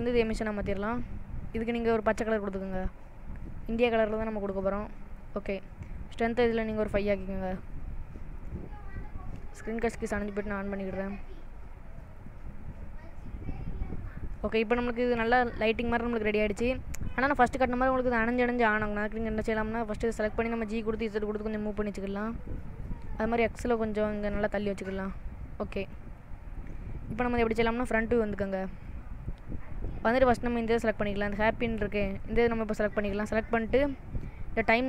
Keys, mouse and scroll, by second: 13.3 n, 13.7-14.2 scroll down 3, 14.2 middle click, 16.4 middle click, 18.3 click, 21.1 g, 23.0 middle click, 24.1 g, 26.3 middle click, 26.9-27.5 scroll down 2, 27.8 KP_1, 28.9 shift+middle click, 29.6-30.0 scroll up 4, 30.4 click, 31.1 shift+middle click.